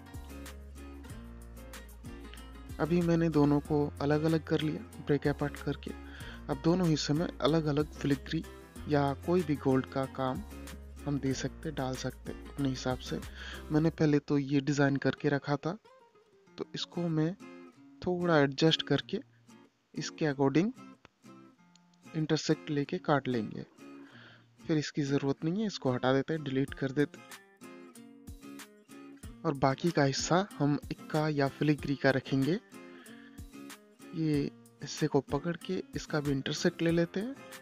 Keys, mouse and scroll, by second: 0.6 click, 2.1 scroll down 1, 3.8 click, 4.6 click, 6.0 t, 7.0 click, 7.6 scroll up 1, 9.9 click, 13.6 click, 15.8-17.2 drag, 25.6-26.2 scroll down 1, 27.2-29.9 drag, 29.9 shift+Page_Down, 31.1 click, 31.7 scroll up 1, 33.6 click, 34.4 click, 35.8 click.